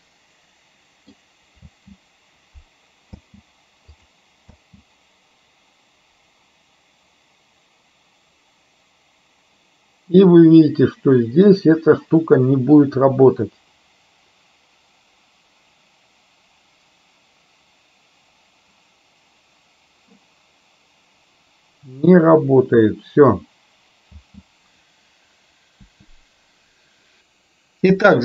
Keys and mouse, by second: 1.8 space, 3.1 space, 4.1 click, 4.5 space, 24.1 space, 26.0 Delete, 27.2 KP_0.